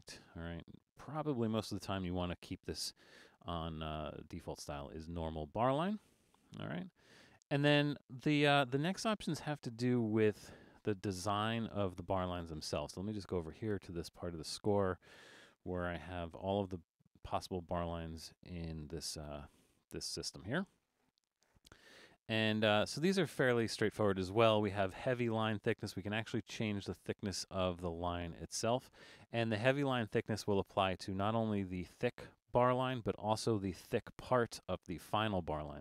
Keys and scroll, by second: 15.7 super+=, 21.8 alt+super+a.